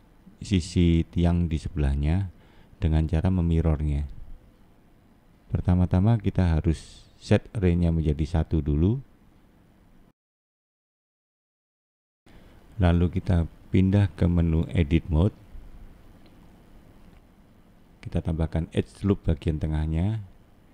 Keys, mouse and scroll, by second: 0.8 middle click, 3.3 scroll down 1, 3.4 middle click, 4.2 scroll up 2, 5.2 shift+middle click, 6.0 shift+middle click, 7.8 click, 11.0-11.4 scroll up 5, 11.4-12.3 scroll down 5, 12.3 shift+middle click, 12.9 click, 16.2 middle click, 17.5 middle click, 20.4 click.